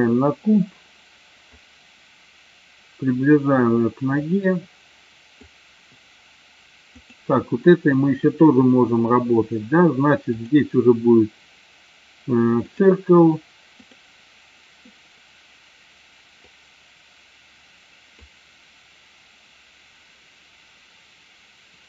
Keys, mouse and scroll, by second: 1.7-5.4 drag, 10.4-12.9 drag, 13.9-14.5 drag, 16.5-19.9 drag.